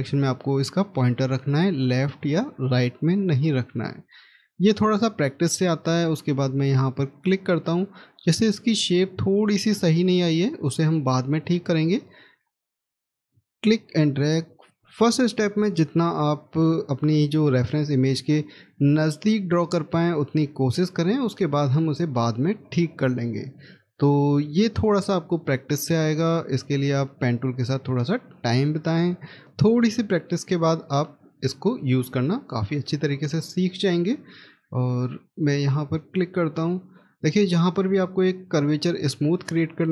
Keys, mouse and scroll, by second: 5.2 scroll up 1, 10.6 scroll down 1, 11.7-14.7 scroll up 1, 17.1 scroll down 1, 18.1 middle click, 23.5-24.0 scroll down 1, 24.1 middle click, 28.0 scroll up 1, 32.2 scroll down 1, 33.0 middle click, 33.3-36.3 scroll up 1, 37.2-38.2 scroll down 1.